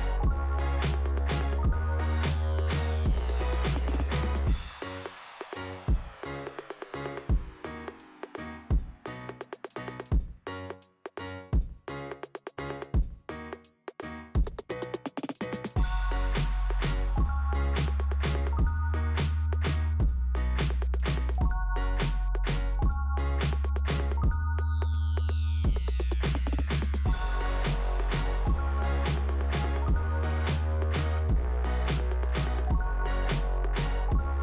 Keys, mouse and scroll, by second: 1.5 click, 5.0-5.3 scroll down 1, 7.2 click, 7.8 click, 8.7 right click, 9.6 click, 10.4 click, 10.5 click, 11.8 right click, 12.2 click, 13.1 ,, 13.8 t, 15.1 scroll up 2, 15.9 middle click, 18.1 middle click, 18.9 scroll up 1, 20.2 click, 21.6 click, 23.1 middle click, 25.1 middle click, 26.8 click.